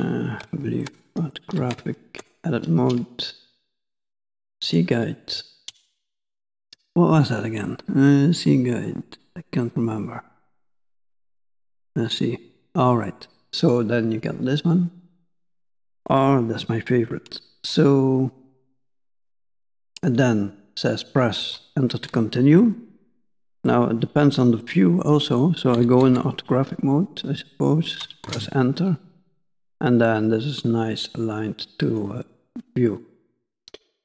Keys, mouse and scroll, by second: 0.0 KP_1, 0.9 shift+middle click, 2.1 Tab, 3.8 click, 4.7 click, 11.7 click, 13.8 middle click, 17.8 middle click, 23.7 middle click, 25.8 KP_5, 26.1 KP_1, 29.3 middle click, 32.4 shift+middle click, 33.4 middle click.